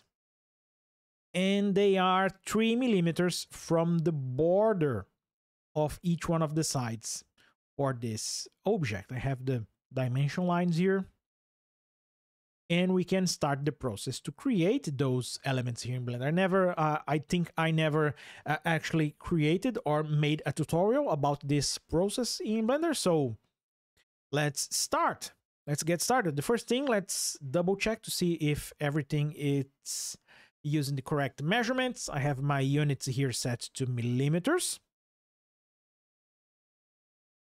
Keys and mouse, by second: 0.3 click, 23.4 click, 35.3 ctrl+alt+o.